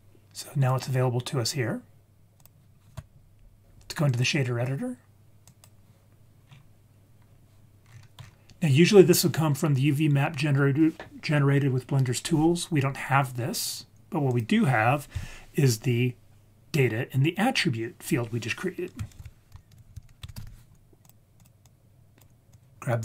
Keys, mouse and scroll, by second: 0.7 click, 1.9 click, 4.1-5.7 drag, 6.4-7.1 scroll down 2, 7.1-7.9 scroll down 2, 7.9-10.2 scroll up 4, 10.2-11.2 scroll up 1, 14.3 click, 19.2 shift+a, 20.4 t, 21.6 click, 22.5 click.